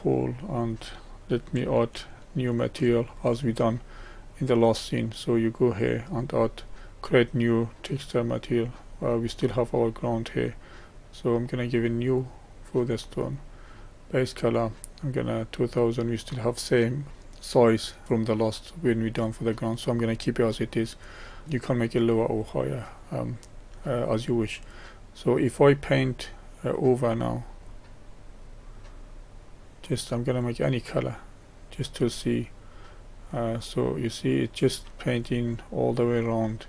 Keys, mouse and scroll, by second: 0.3 scroll up 1, 1.8-21.5 shift+middle drag, 22.7-27.6 middle drag, 27.6-34.5 drag.